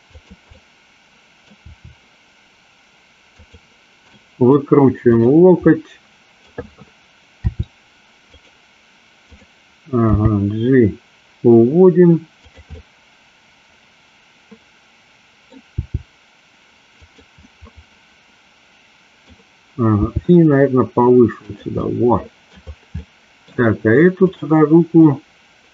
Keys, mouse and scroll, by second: 0.1 click, 0.5 middle click, 1.7 r, 3.4 click, 4.2 middle click, 5.3 click, 5.8 middle click, 7.5 r, 8.3 click, 10.2 g, 12.5 click, 12.8-15.7 middle drag, 15.8 g, 17.0 click, 17.4-19.3 middle drag, 20.1 g, 21.5 click, 21.8 middle click, 23.1 middle click, 24.4 click, 25.0 middle click.